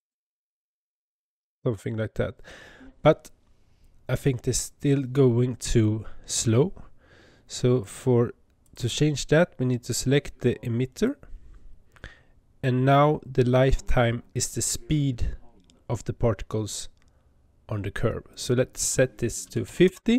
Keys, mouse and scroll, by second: 4.3 Tab, 7.7 click, 8.5 click, 10.9 click, 18.2-20.1 drag.